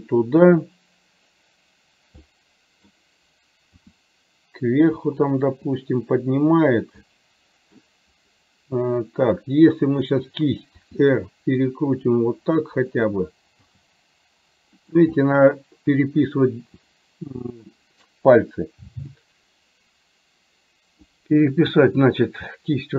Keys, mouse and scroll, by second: 2.4 middle click, 3.7 r, 7.1 middle click, 10.1 click, 11.0 r, 13.7 g, 15.2-17.7 middle drag, 19.4-21.4 drag, 21.9-22.9 middle drag.